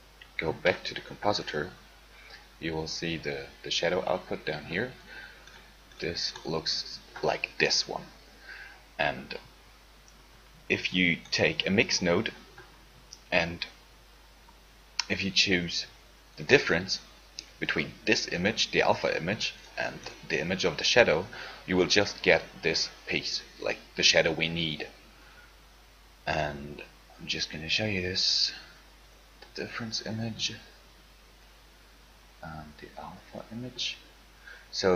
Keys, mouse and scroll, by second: 0.8 ctrl+Left, 16.6 shift+a, 30.2-33.7 drag.